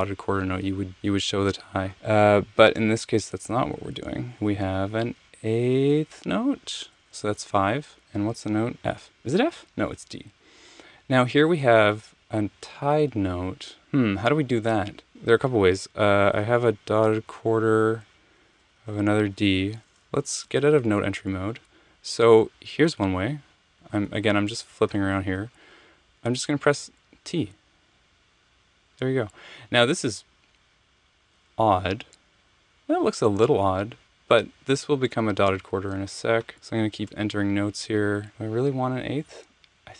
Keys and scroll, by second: 7.3 5, 9.1 f, 10.3 alt+Page_Down, 17.5 6, 18.8-21.0 typing, 22.8 Left, 23.8 Right, 23.9 Left, 24.1 Left, 24.7 Left, 26.7 t, 37.1 Return.